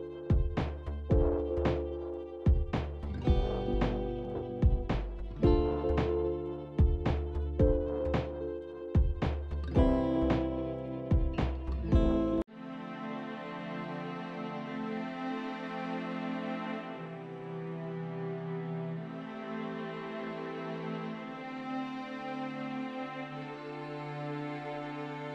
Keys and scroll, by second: 5.6 ctrl+x, 9.0 ctrl+v, 9.9 ctrl+a, 11.8-12.6 typing, 14.0-16.3 typing.